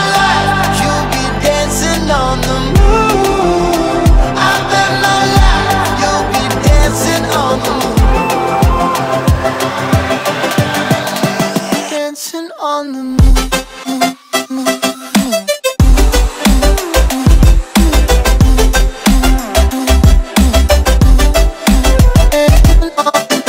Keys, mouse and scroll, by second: 0.3 alt+click, 0.6-0.9 alt+middle drag, 0.9 alt+drag, 1.1 alt+middle drag, 1.3-1.6 alt+drag, 1.6-2.6 alt+middle drag, 2.6-3.8 drag, 4.1 alt+right click, 4.2 alt+click, 4.8 alt+click, 5.1 alt+middle drag, 5.3 alt+right drag, 5.4 alt+click, 5.5 alt+middle drag, 5.7 alt+right drag, 5.8-6.7 alt+drag, 6.7 alt+middle drag, 6.9 alt+right click, 7.1-7.7 alt+middle drag, 7.7 click, 9.1 click, 9.9 click, 11.5 click, 12.3-13.4 drag, 13.4 KP_0, 14.6-16.7 drag, 17.3 click, 18.7-19.7 drag, 20.8 click, 21.4 KP_0, 21.5 KP_0, 22.8-23.4 drag.